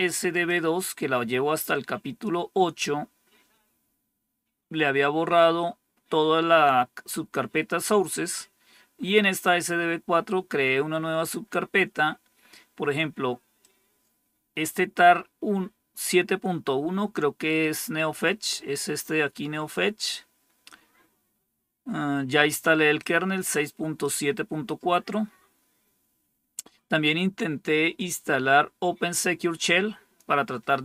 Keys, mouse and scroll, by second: 0.3-2.2 drag, 13.5-16.0 drag, 18.4-19.9 drag, 22.9-23.9 drag, 27.9-30.1 drag.